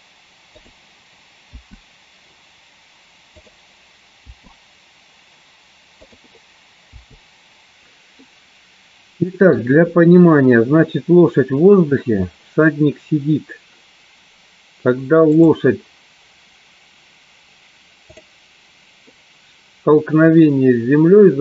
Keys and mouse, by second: 1.2 click, 3.9 click, 6.5 click, 7.5 i, 8.4-9.7 middle drag, 15.9 click, 18.8 click.